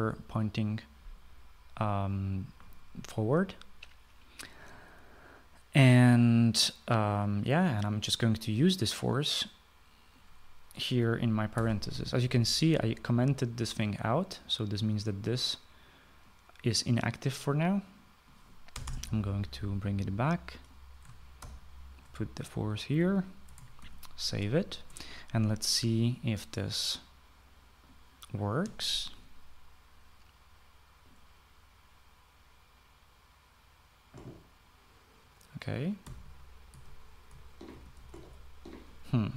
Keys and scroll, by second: 12.1 ctrl+c, 19.3 BackSpace, 19.5 BackSpace, 22.0 ctrl+v, 24.4 ctrl+s, 36.6-39.2 typing.